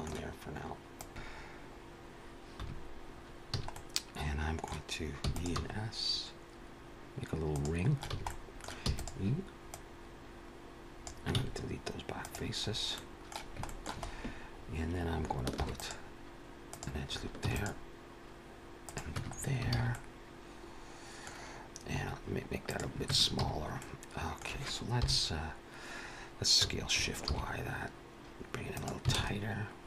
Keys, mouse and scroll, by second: 0.9 click, 1.1 ctrl+z, 1.1 Tab, 1.1 click, 2.5 1, 3.4 a, 3.6 middle click, 5.1 e, 5.4 s, 8.0 a, 8.1 middle click, 8.8 e, 9.6 click, 11.8 x, 12.6 scroll up 2, 12.8 middle click, 13.6 shift+middle click, 13.9-14.4 scroll up 2, 14.4-14.7 scroll down 1, 15.5 ctrl+r, 17.5 ctrl+r, 19.0 Tab, 19.2-19.6 scroll down 4, 19.6 alt+a, 19.8 middle click, 21.3-21.9 scroll down 2, 21.9-22.3 scroll up 2, 22.6 click, 23.0 Tab, 23.3 a, 23.7 middle click, 24.8 KP_1, 27.1 s.